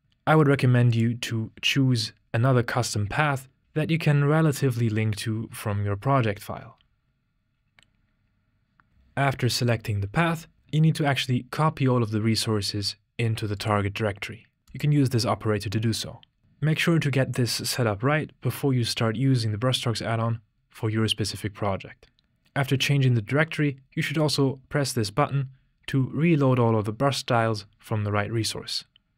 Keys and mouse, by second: 24.3 typing.